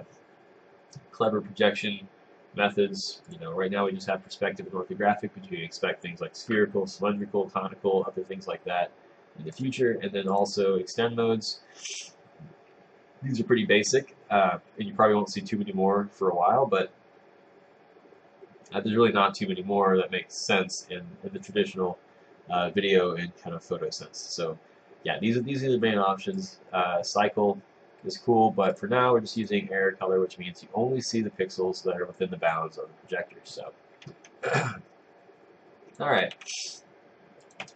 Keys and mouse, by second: 34.6 click.